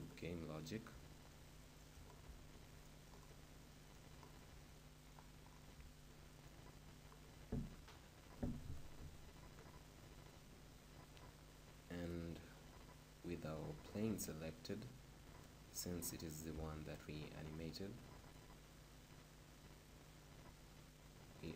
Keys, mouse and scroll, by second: 0.0 click, 1.1-7.7 middle drag, 8.8-11.5 right drag, 12.2-14.1 right drag, 18.6-19.6 middle drag.